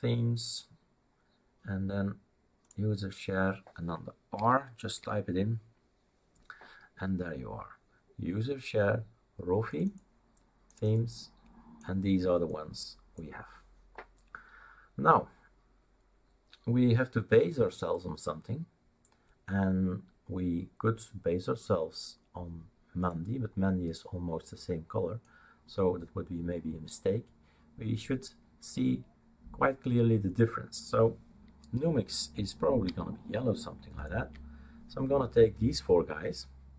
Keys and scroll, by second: 4.7-5.5 typing.